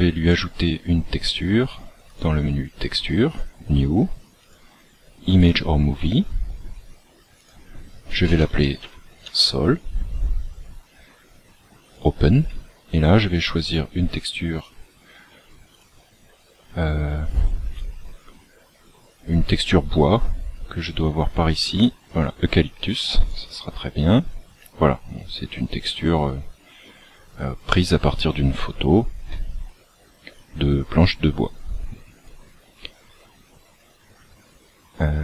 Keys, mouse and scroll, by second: 0.2-1.8 scroll up 5, 2.0 scroll up 2, 2.0 click, 3.2 click, 7.3 click, 10.3-10.7 scroll down 5, 11.8 click, 23.3 click, 30.2 click.